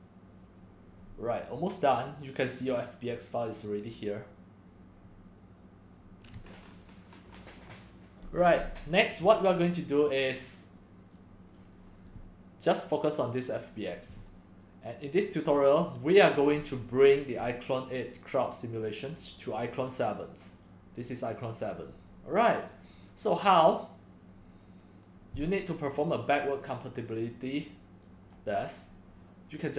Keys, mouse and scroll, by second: 9.4-11.3 drag, 15.2 click, 15.5 drag, 16.4-20.1 drag, 20.7 click, 20.9 click, 22.6 click, 22.8-25.5 drag, 28.4-29.7 drag.